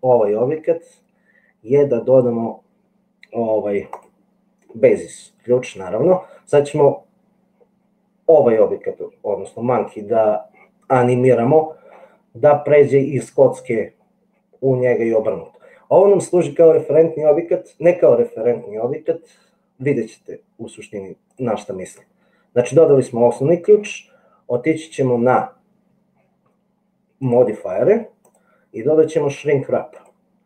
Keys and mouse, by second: 27.2 click, 28.7-30.3 drag.